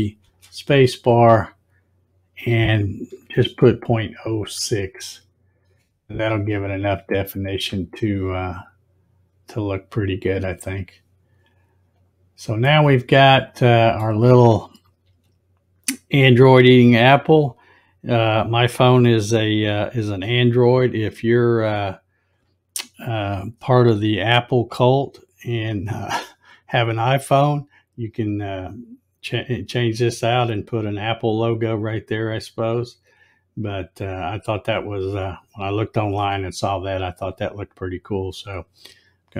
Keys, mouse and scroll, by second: 0.3 space, 10.3 click, 11.9 click, 12.7-14.0 middle drag, 15.1 z.